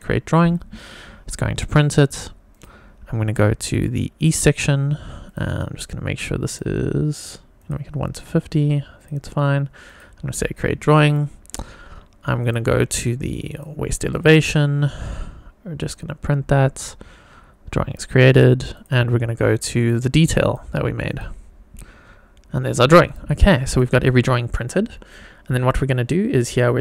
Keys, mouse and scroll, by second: 2.6 click, 3.7 click, 4.2 click, 5.2 click, 6.5 click, 7.6-9.1 drag, 9.9 click, 12.5 click, 13.5-14.0 drag, 14.1 click, 15.8 click, 19.8-20.5 drag, 21.1 click, 23.7 click.